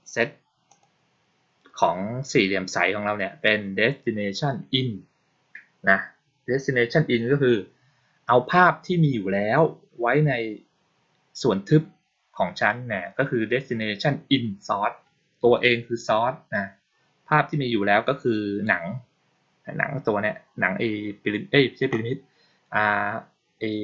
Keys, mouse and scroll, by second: 0.6 click.